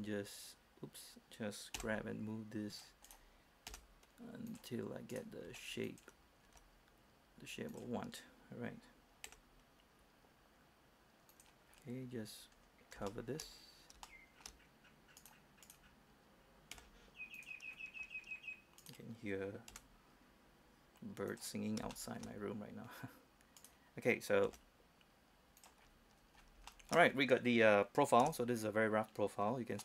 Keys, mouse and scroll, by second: 0.0 f, 1.9 g, 2.9 click, 3.2 right click, 3.9 g, 4.7 click, 5.3 right click, 5.6 g, 6.0 click, 6.6 g, 7.9 click, 9.5 g, 11.5 click, 11.9-12.3 scroll down 1, 12.3-12.7 scroll up 1, 12.7-13.2 scroll down 1, 13.3 shift+middle click, 13.7-14.1 scroll up 1, 14.2 shift+middle click, 15.4-16.9 right drag, 16.9 g, 17.5 click, 17.9 scroll down 1, 18.2-18.9 scroll up 1, 19.0 right click, 19.9 g, 21.5 click, 22.1 shift+middle click, 23.8 right click, 24.6 g, 25.8 click, 26.0-26.4 scroll down 1, 26.4 scroll up 1, 26.6 scroll down 1, 26.9 shift+middle click, 27.3 scroll up 1, 27.5 scroll down 1, 27.7-28.4 scroll up 1, 28.4 Tab, 28.7-29.6 scroll down 1.